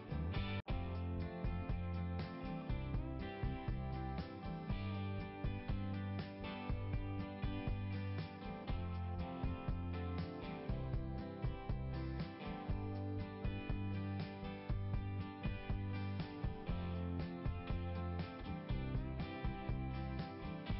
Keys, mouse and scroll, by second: 3.6 click, 4.7 click, 5.9 click, 14.4 click, 14.7 click, 15.7 scroll up 1, 19.5 right click.